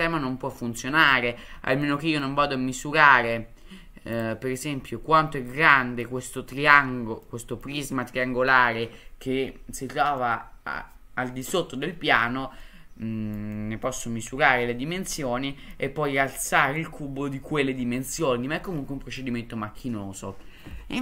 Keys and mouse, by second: 0.8-1.1 middle drag, 1.8-2.2 middle drag, 4.2 click, 5.7 middle click, 7.2-7.6 middle drag, 10.2-11.5 middle drag, 12.6-13.4 middle drag, 13.5-13.8 drag, 15.2 click, 15.3-15.7 middle drag, 16.5-16.8 middle drag, 19.2-19.8 middle drag.